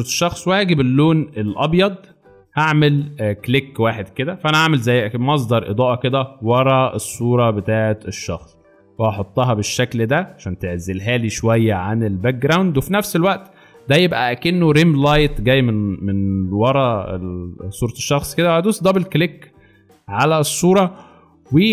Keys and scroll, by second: 0.7 b, 1.4 x, 4.4 v, 6.4 ctrl+t, 13.8 alt+Return, 14.4 alt+space.